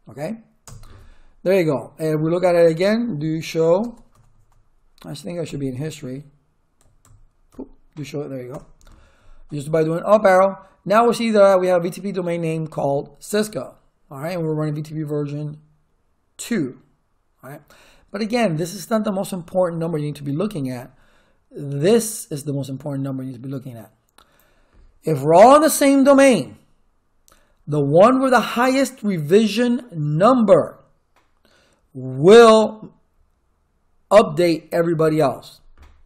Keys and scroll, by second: 0.6 Return, 2.7-4.1 typing, 5.4 Up, 6.8 Up, 7.5 Down, 8.5 Return.